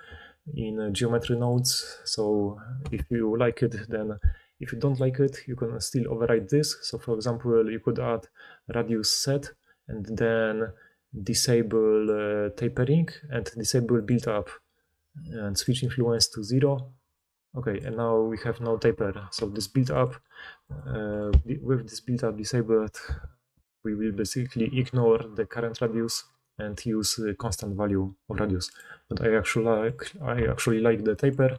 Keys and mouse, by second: 5.3-6.3 drag, 14.1-15.6 drag, 19.6 click, 20.0 click, 20.8 click.